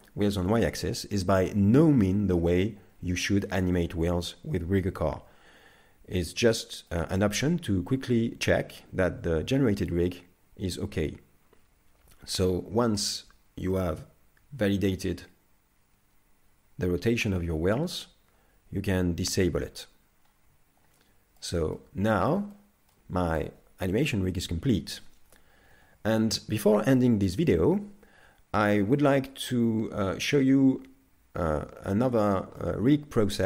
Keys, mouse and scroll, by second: 2.1 shift+middle click, 2.9-3.4 scroll up 3, 3.4 scroll down 2, 6.5 shift+middle click, 13.3 g, 19.4 click, 20.1-20.9 scroll down 2, 20.9 shift+middle click, 21.8 middle click, 22.5 shift+middle click, 32.6 middle click.